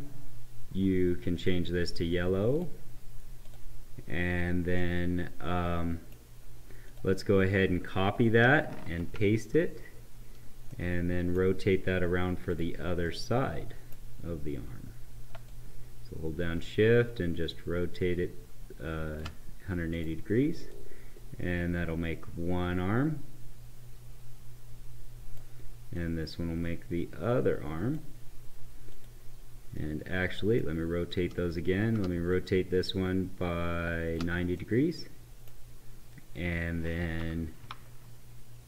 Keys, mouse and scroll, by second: 4.7-6.3 right drag, 6.8 click, 8.3 ctrl+c, 10.6-12.5 right drag, 12.5 click, 12.9-15.4 right drag, 15.4-28.9 shift+drag, 29.6-32.2 right drag, 32.2-34.5 shift+drag, 34.5-37.7 right drag, 37.7 ctrl+Up.